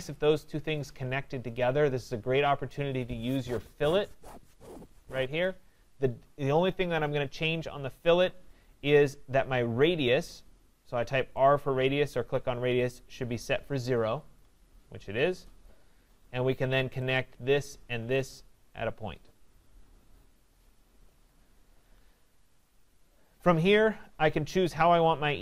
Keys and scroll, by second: 15.6 Return, 21.1 Escape.